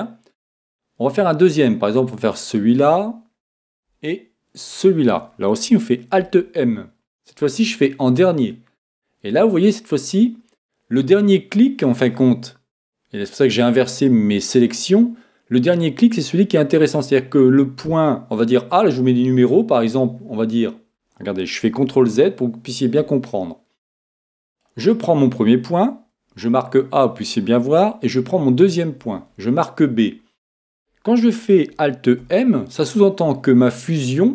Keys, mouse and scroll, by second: 2.5-4.4 right drag, 4.6-6.6 right drag, 6.2 alt+m, 21.8 super+z, 24.5-26.3 right drag, 28.7-30.6 right drag, 32.2 alt+m.